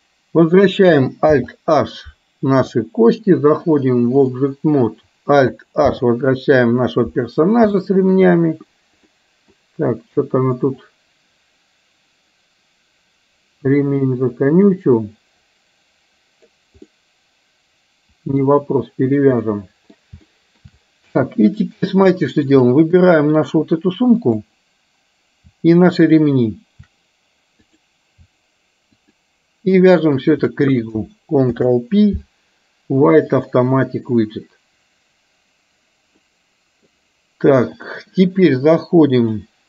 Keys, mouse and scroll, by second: 2.2 alt+h, 3.7-4.5 drag, 6.2 alt+h, 7.7 shift+middle click, 9.1-9.6 middle drag, 10.8-16.6 drag, 16.8-18.6 middle drag, 19.6-20.0 middle drag, 20.2-20.7 shift+middle drag, 21.2-21.8 middle drag, 22.2-22.6 shift+middle drag, 23.1-23.5 middle drag, 24.3 click, 26.0 shift+click, 27.8 click, 29.1 shift+click, 30.2 shift+click, 31.8 ctrl+p, 36.2-37.0 middle drag, 37.7 click, 39.5-39.6 drag.